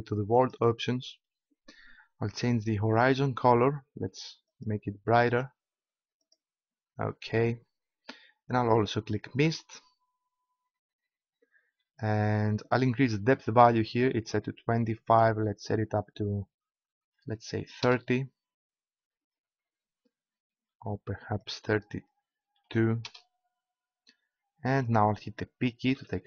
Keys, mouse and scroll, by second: 0.4-2.8 drag, 2.9-5.0 drag, 10.5 click, 15.0-16.1 middle drag, 21.4-22.8 middle drag, 25.9 p.